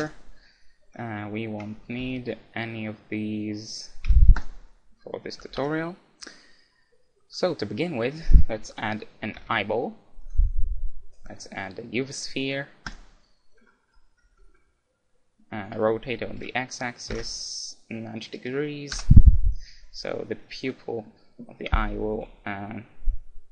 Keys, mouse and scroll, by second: 1.7 a, 2.0 a, 2.9-4.9 middle drag, 4.0 x, 5.6 KP_1, 5.6 KP_5, 9.4 shift+a, 13.6-17.1 middle drag, 16.3 r, 20.0-23.5 middle drag.